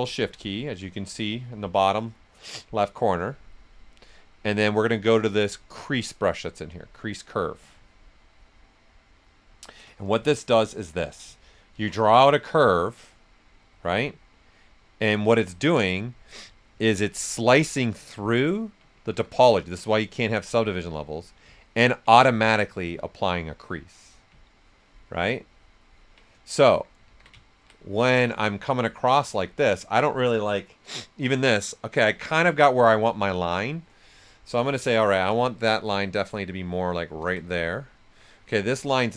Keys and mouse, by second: 7.5 ctrl+shift+click, 10.5 ctrl+shift+click, 10.5 typing, 10.6 alt+right click, 11.7 ctrl+shift+click, 15.6 right click, 17.2 ctrl+right click, 18.8-19.6 typing, 19.3-21.5 drag, 21.5-24.4 ctrl+right drag, 21.8-22.6 typing, 26.2 right click, 27.0 ctrl+z, 27.4 ctrl+right click, 29.4 typing, 34.3 alt+right click, 34.3 typing, 34.9 ctrl+shift+click, 35.8 ctrl+shift+space, 37.8 alt+right click.